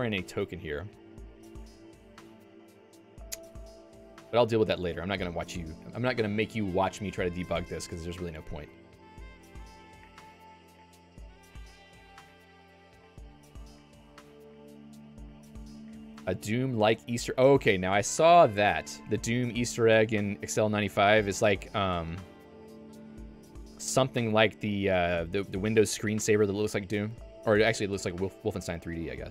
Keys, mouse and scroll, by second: 12.0 ctrl+d, 12.4 ctrl+d, 22.2 click.